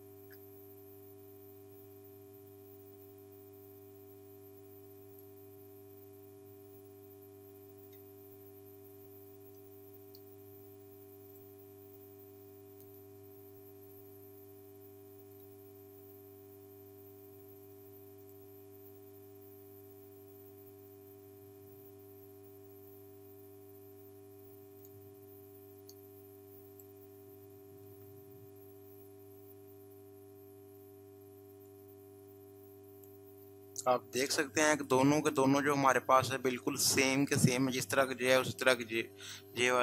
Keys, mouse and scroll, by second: 3.0-7.5 drag, 7.7 click, 8.0 ctrl+z, 9.6-12.9 drag, 12.9 right click, 15.3 right click, 18.2 click, 24.8-27.9 drag, 27.9 Right, 31.7 click.